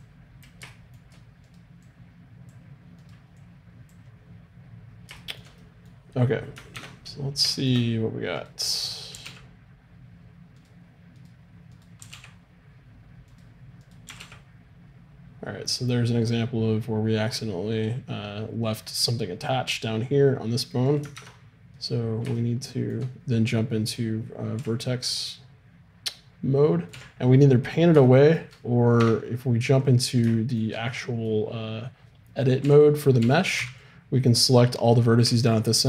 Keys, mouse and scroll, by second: 0.0-5.2 drag, 0.0-2.6 right drag, 0.7-2.5 middle drag, 3.9-5.2 right drag, 4.7 middle click, 6.8 ctrl+Tab, 9.1 r, 12.0 r, 14.1 r, 20.9 right click, 21.2 ctrl+Tab, 24.7 z, 26.9 z, 29.0 Tab, 32.6 a, 33.2 z, 33.6 b.